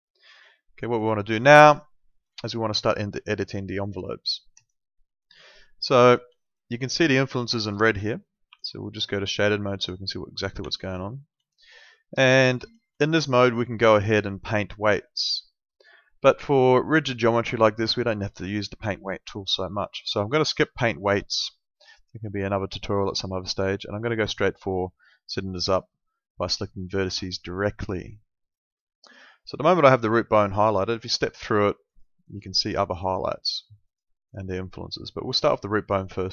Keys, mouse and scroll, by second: 0.3 click, 1.8 alt+middle click, 4.6 click, 5.4 alt+middle click, 6.9 middle click, 8.5 F3, 10.6 F4, 11.4 alt+middle click, 22.5 click, 28.6 click.